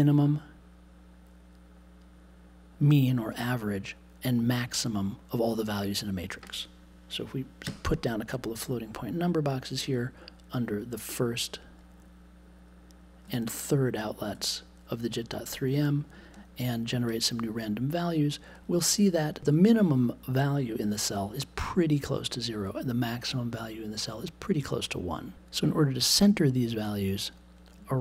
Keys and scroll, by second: 7.6 f.